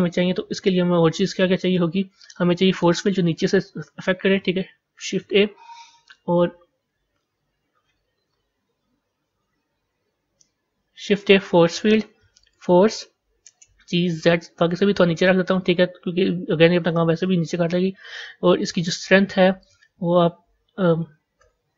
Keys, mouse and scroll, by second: 1.5 z, 2.2-4.3 middle drag, 4.3 shift+a, 13.6 g, 17.9 click, 18.5 click, 19.5-21.7 drag.